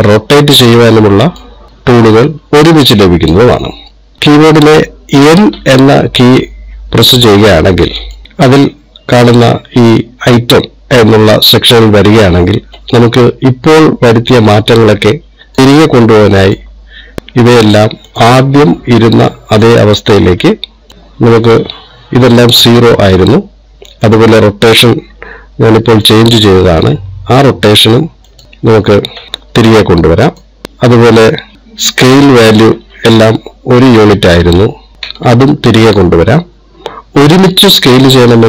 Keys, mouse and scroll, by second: 0.2 click, 1.8 click, 4.2 click, 6.0 n, 8.2 click, 14.8 click, 17.0 click, 20.1 click, 20.9 click, 24.6 click, 27.2 KP_0, 28.4 click, 28.8 click, 30.6 click, 30.7 KP_0, 32.7 click, 34.9 click.